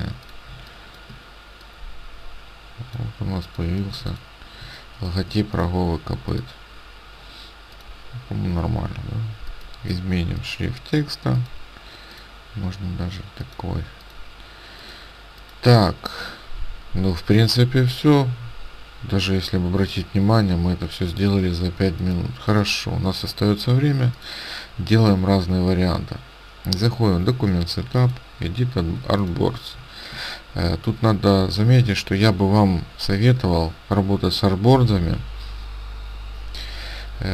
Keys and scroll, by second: 3.9 space, 29.0 ctrl+space.